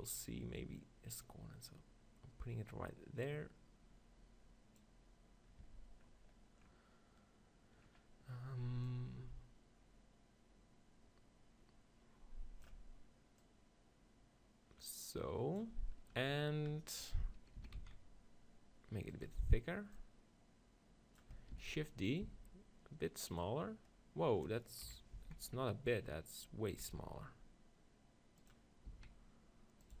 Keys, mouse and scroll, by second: 5.7 Tab, 6.1-8.9 middle drag, 8.9-10.7 drag, 13.4-15.3 drag, 17.6 s, 19.3-21.8 drag, 21.6 shift+d, 22.3-23.6 right drag, 22.3 s, 23.4 click, 24.7 click, 25.0 KP_7, 25.2 z, 25.6-27.3 middle drag, 26.9 g, 28.5-30.0 drag, 28.9 s.